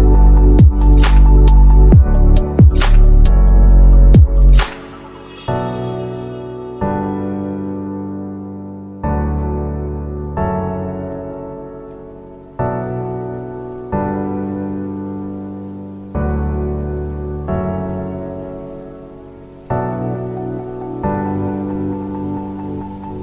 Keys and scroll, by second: 6.9 ctrl+g, 7.6 space, 11.4 space, 21.0 BackSpace.